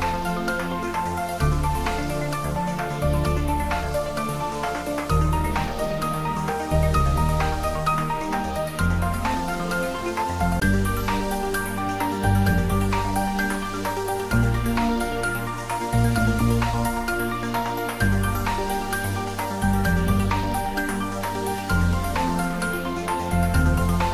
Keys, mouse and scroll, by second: 0.4 r, 9.0 click, 9.9 scroll up 1, 11.2-12.0 scroll down 1, 12.7-14.2 scroll up 1, 14.2 Tab, 16.8 click, 17.8-18.3 scroll down 1, 18.6-24.1 middle drag.